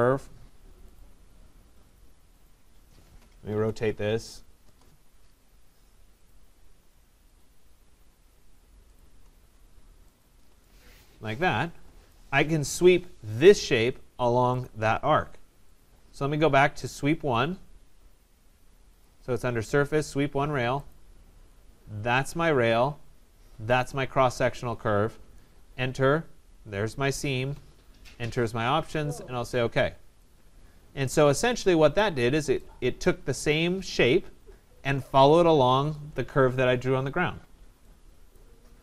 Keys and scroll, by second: 4.6 Return, 25.3 Return.